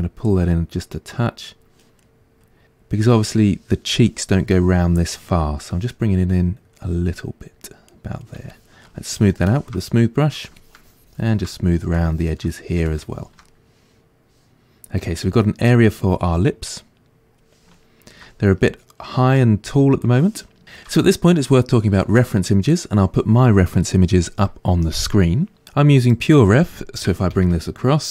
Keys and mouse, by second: 2.0-6.3 middle drag, 6.3-7.9 drag, 7.9 middle click, 8.5-9.8 shift+drag, 9.8 middle click, 10.6 shift+click, 11.5 middle click, 12.0 shift+click, 12.6 middle click, 12.9 shift+click, 13.5-28.1 middle drag.